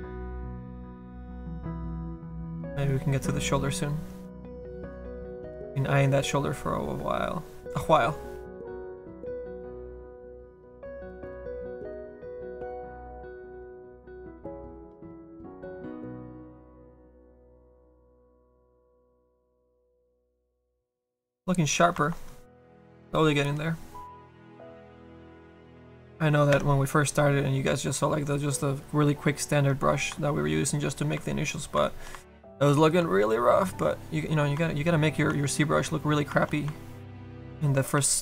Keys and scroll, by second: 13.4 s, 15.0 s, 15.6 s, 37.9 s.